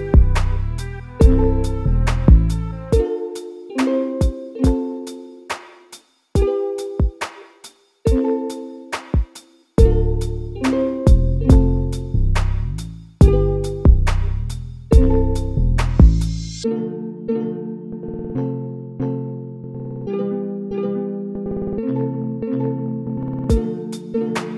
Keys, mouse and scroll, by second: 0.7 KP_Divide, 1.4-2.8 scroll up 1, 2.8 ctrl+3, 4.2 click, 5.0 a, 5.7 alt+e, 8.4 a, 8.6 a, 9.0 middle click, 9.5-9.9 scroll up 2, 9.9 2, 10.2 click, 10.3 click, 11.0 ctrl+x, 11.3 click, 11.5 click, 11.8 ctrl+x, 12.8-14.2 shift+middle drag, 14.2 click, 14.3 click, 15.2 alt+e, 17.7 g, 22.1 a, 22.5 click, 22.6 click, 23.1 a, 23.3 a.